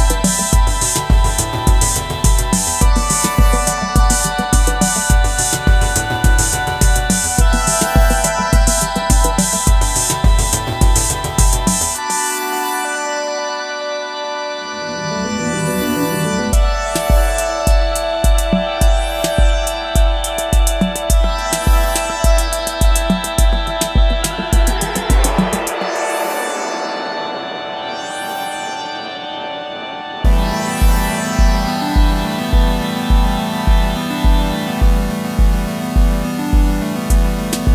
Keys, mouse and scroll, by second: 31.2 double click.